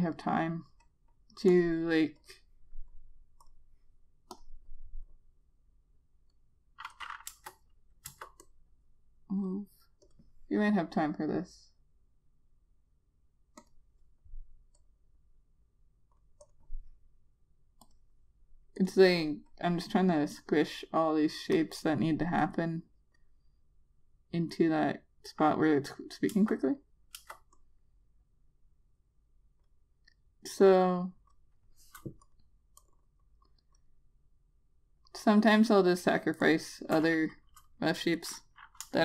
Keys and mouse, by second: 8.0 click, 8.9 Return, 9.2 click, 14.4 click, 27.1 Return, 27.9 Return, 28.3 click.